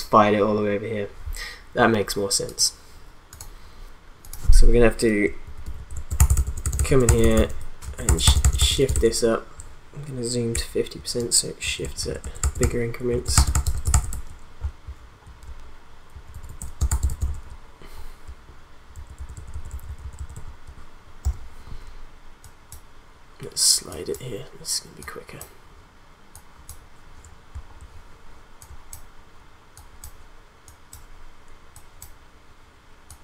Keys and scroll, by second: 5.4 shift+Up, 5.9 shift+Left, 6.1 shift+Up, 6.2 shift+Left, 6.3 shift+Up, 6.6 shift+Left, 6.7 shift+Up, 7.0 shift+Left, 7.2 shift+Up, 7.8 shift+Left, 7.9 shift+Up, 8.1 shift+Left, 8.2 shift+Up, 8.3 shift+Left, 8.6 shift+Up, 8.8 shift+Left, 11.6 shift+Left, 12.1 shift+Up, 12.2 shift+Left, 12.3 shift+Up, 12.5 shift+Left, 12.6 shift+Up, 13.8 shift+Left, 13.9 shift+Up, 16.1 shift+Up, 16.6 shift+Left, 16.8 shift+Up, 17.0 shift+Left, 17.2 shift+Up, 17.4 shift+Left, 18.9 shift+Left, 21.2 p.